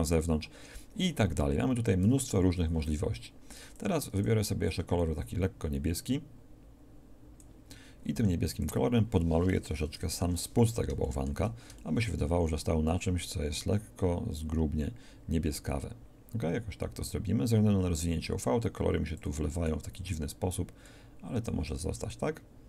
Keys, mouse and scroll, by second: 3.7-7.4 drag, 8.2 f, 10.1 ctrl+KP_7, 19.4 click.